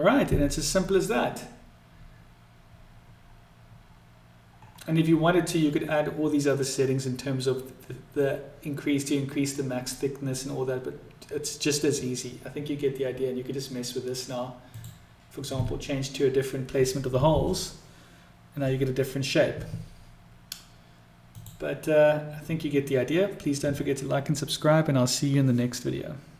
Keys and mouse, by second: 14.7-17.7 drag, 21.2-24.7 drag.